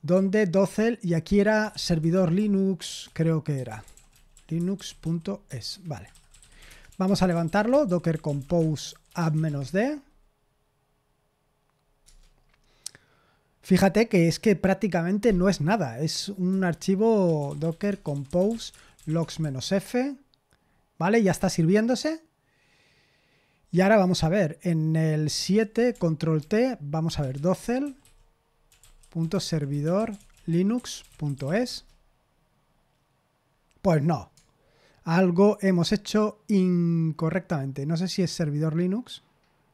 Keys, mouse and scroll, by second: 0.0-10.1 typing, 5.6 Escape, 12.0 Return, 16.4 Return, 17.0-19.9 typing, 25.4 super+7, 26.4 ctrl+t, 26.9-31.9 typing.